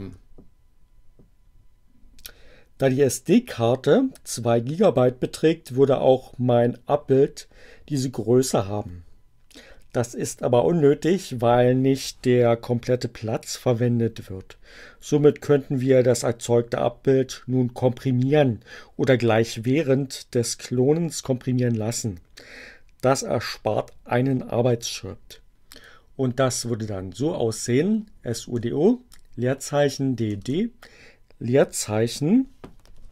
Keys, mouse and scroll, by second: 26.7 BackSpace, 30.0 BackSpace, 32.9-33.1 typing.